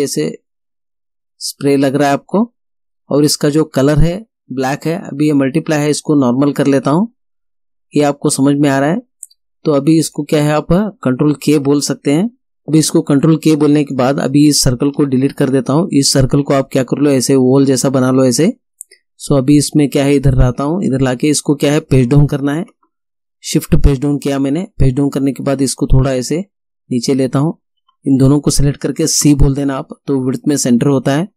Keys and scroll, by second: 15.0 Delete, 22.3 shift+Page_Down, 29.3 c.